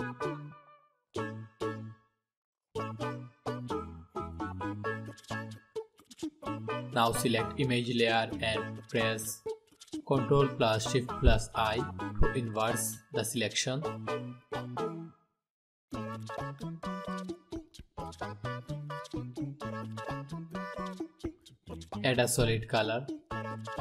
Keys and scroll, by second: 9.6 ctrl+shift+i.